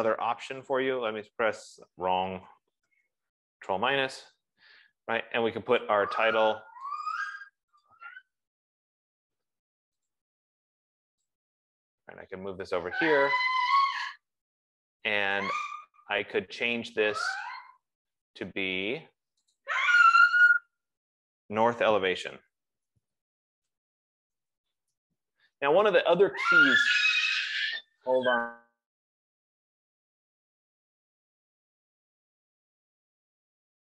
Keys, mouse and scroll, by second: 1.2 super+-, 1.2 click, 3.3 super+-, 3.8 ctrl+-, 6.4 ctrl+-, 7.1 click, 8.3 click, 10.5 click, 13.9 click, 14.7 click, 15.7 click, 15.9 click, 16.0 click, 17.6 click, 17.9 click, 20.0 click, 21.0 ctrl+a, 22.5 Caps_Lock, 22.8-25.9 typing, 27.9 click.